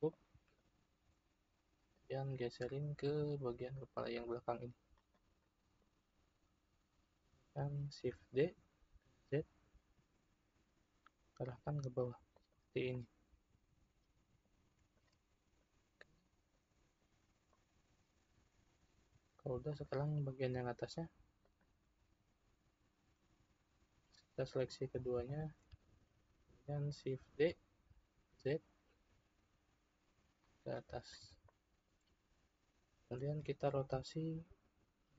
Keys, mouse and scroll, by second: 0.1 click, 1.9 click, 5.4-6.4 middle drag, 6.4 click, 8.5 shift+d, 12.9-14.9 middle drag, 14.9 shift+click, 15.5 click, 17.0 click, 17.5-19.7 middle drag, 19.7 click, 21.4 shift+click, 24.5 click, 25.2 shift+click, 27.3 shift+d, 31.6-34.6 shift+middle drag.